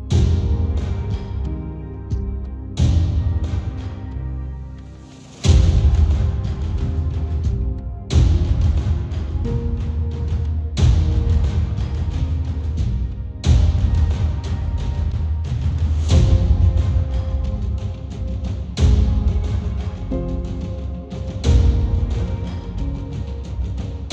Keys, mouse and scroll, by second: 3.8-7.7 drag, 7.7-11.0 middle drag, 13.0-20.1 middle drag, 13.6 click, 15.3 shift+click, 18.4 ctrl+g, 20.1-22.4 drag, 22.4-23.8 middle drag, 23.8-24.1 drag.